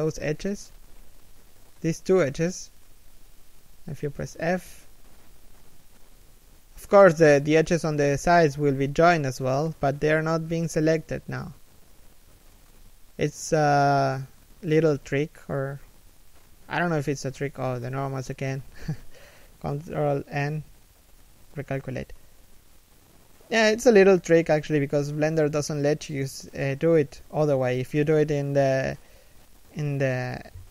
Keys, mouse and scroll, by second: 1.4 shift+right click, 9.9 middle click, 10.9 shift+middle click, 13.4 f, 16.4 z, 16.8 middle click, 18.8 a, 19.7 ctrl+n, 22.9 middle click, 24.9-25.2 scroll down 1, 25.2 middle click, 27.1 scroll down 1, 28.5 KP_7, 29.3 KP_1, 29.8 a, 30.0 scroll down 1, 30.1 z.